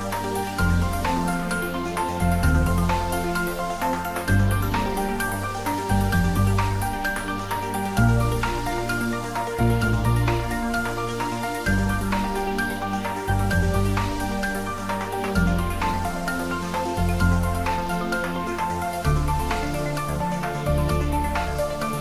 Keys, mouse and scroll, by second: 0.4 ctrl+z, 1.3 ctrl+z, 1.9-4.0 typing, 3.0 click, 6.0 click, 6.3-7.3 typing, 7.9 click, 8.4 g, 9.0 y, 9.7 x, 11.1 click, 11.8 shift+d, 12.1 z, 15.3 click, 16.1-17.6 middle drag, 17.6 ctrl+z, 19.5 click, 21.4 shift+d.